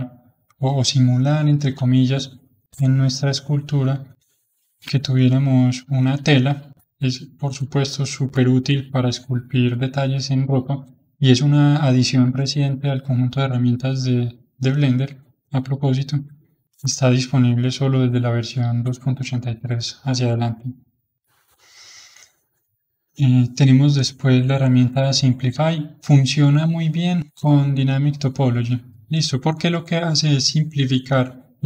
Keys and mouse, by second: 0.3-2.8 middle drag, 2.8-4.4 drag, 4.4-9.6 middle drag, 15.7-22.6 middle drag, 22.6-28.7 drag, 28.7 middle click, 29.5-31.6 drag.